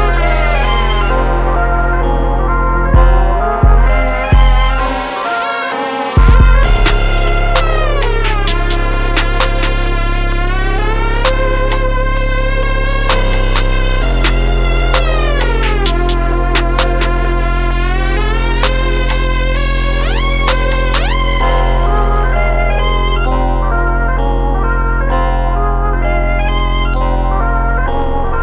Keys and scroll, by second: 10.0 t, 11.7 c, 13.5 t, 13.9 4.